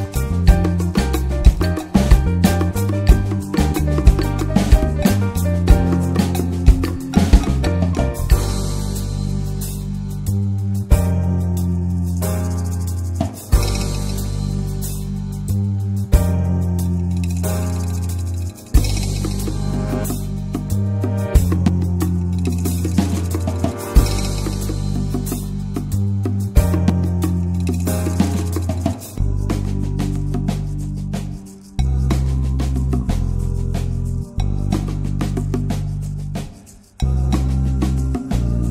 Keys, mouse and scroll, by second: 1.9-2.5 middle drag, 2.5-3.2 scroll up 2, 3.7 click, 5.3 scroll down 1, 5.5-6.5 middle drag, 6.5 scroll up 1, 6.6 scroll down 1, 6.8-8.0 middle drag, 8.0 scroll down 1, 8.2 click, 8.5 middle click, 9.1 alt+h, 9.4 drag, 9.6 middle drag, 9.7 scroll up 2, 9.9 shift+middle click, 11.3-12.9 drag, 12.9 middle drag, 13.1-13.5 scroll up 3, 13.5 middle click, 13.8-14.9 scroll up 3, 14.9-15.8 scroll down 3, 15.1 middle click, 17.9-18.9 drag, 18.9 scroll down 1, 19.2-21.0 middle drag, 21.0 click, 22.0 scroll down 3, 22.2-22.8 middle drag, 22.8 scroll up 1, 23.0-24.5 middle drag, 24.5-31.4 drag, 31.4 ctrl+s, 31.9 shift+middle drag, 32.2-32.8 shift+scroll up 3, 32.4 middle drag, 32.8-35.6 middle drag, 35.6 ctrl+s, 36.0-37.4 drag, 37.4 scroll down 2, 37.6-38.1 middle drag, 38.1 scroll up 2, 38.3-38.7 middle drag.